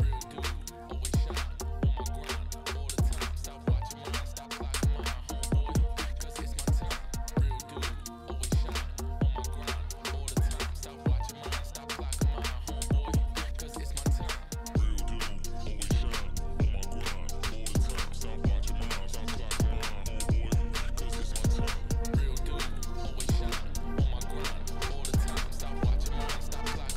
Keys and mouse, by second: 0.5 KP_1, 2.0 drag, 2.7-3.4 drag, 3.6 Tab, 4.6 middle click, 5.1 Tab, 5.6-6.0 middle drag, 6.7 click, 7.1 Tab, 7.3 middle click, 8.5 middle click, 8.9 2, 9.9 alt+click, 12.2 alt+shift+click, 13.0 middle click, 14.2 alt+shift+click, 16.3 alt+shift+click, 17.3 middle click, 17.7 middle click, 18.5 shift+click, 18.9 shift+click, 19.6 middle click, 20.7-21.9 middle drag, 22.2 shift+middle click, 22.5 middle click, 23.3 middle click, 25.2 middle click, 25.9 shift+click, 26.2 middle click.